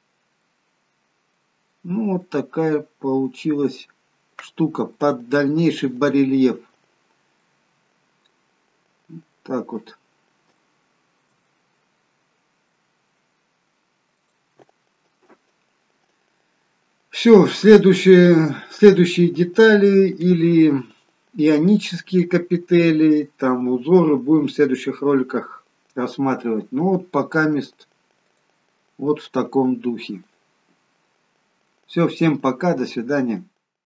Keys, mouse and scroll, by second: 0.1-0.5 scroll up 2, 0.5 middle click, 1.8-2.3 scroll down 1, 2.3 middle click, 3.6-4.6 scroll down 2, 4.6-5.0 scroll down 3, 5.0 middle click, 7.0-7.6 scroll up 1, 7.6 middle click, 7.6-8.1 scroll up 1, 9.6-10.2 scroll down 1, 11.4 shift+middle click, 11.5 middle click, 14.4 click, 28.5 click, 29.9-30.5 scroll down 1, 30.5-31.2 scroll up 1.